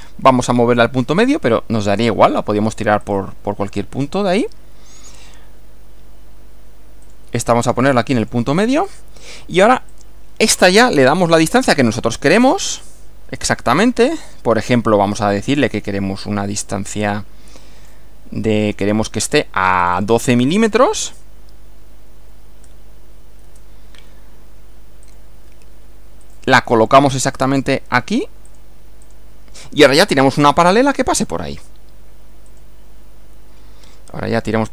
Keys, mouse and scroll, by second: 3.1 click, 7.0 click, 8.2 click, 8.9 click, 9.9 click, 11.6-12.6 drag, 14.3 click, 17.1 click, 18.5 click, 19.7 click, 20.8 click, 22.3 1, 22.6 2, 23.5 Return, 25.1 click, 26.3 click, 27.3 click, 28.5 click, 29.1 click, 32.5 click.